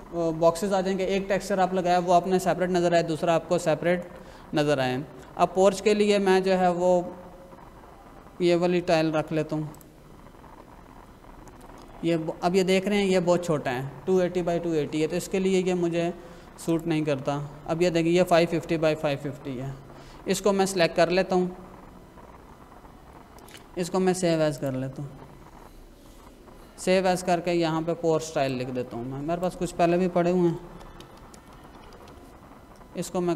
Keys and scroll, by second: 30.2-32.1 typing.